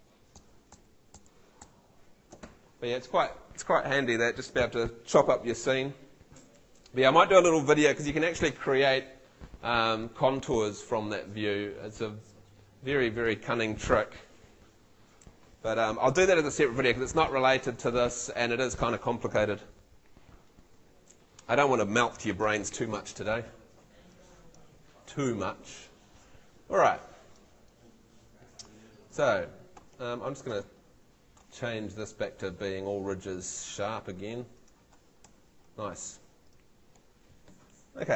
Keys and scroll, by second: 29.8 Escape, 35.2 ↺.